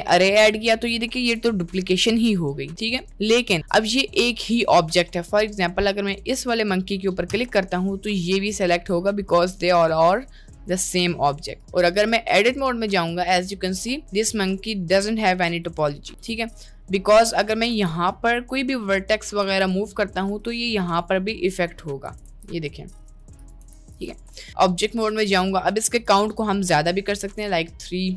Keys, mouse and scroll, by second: 0.6 middle click, 1.3 click, 2.9 middle click, 3.6 middle click, 9.4 g, 12.2 middle click, 12.4 Tab, 14.2-15.8 drag, 16.7 middle click, 17.4 click, 17.8 g, 19.1 middle click, 19.5 g, 22.4 g, 23.8 g, 24.4 Tab, 26.2 click.